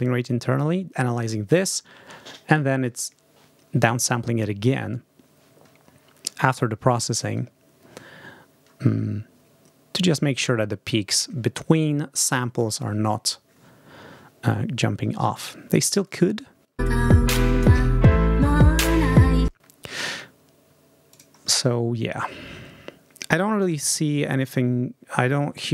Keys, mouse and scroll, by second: 15.9-16.2 ctrl+scroll down 2, 16.7 ctrl+space, 19.3 space, 21.0 click.